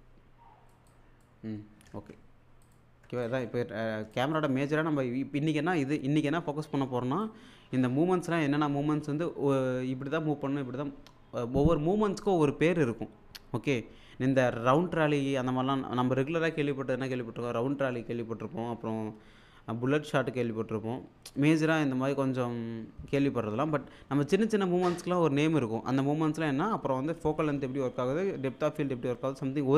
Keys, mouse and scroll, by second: 2.0 alt+Tab, 2.6 alt+click, 7.5-8.5 drag.